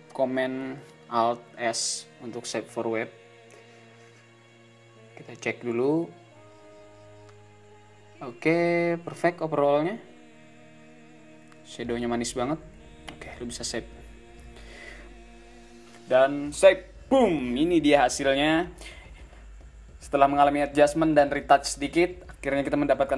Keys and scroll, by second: 13.4 shift+-.